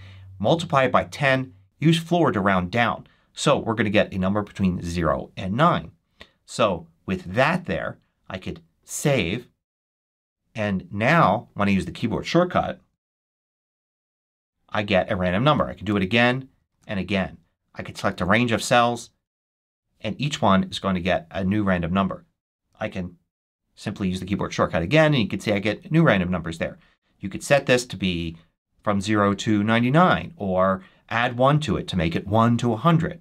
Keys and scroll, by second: 13.3 shift+super+1, 15.7 shift+super+1, 19.3 shift+super+1, 23.2 shift+super+1.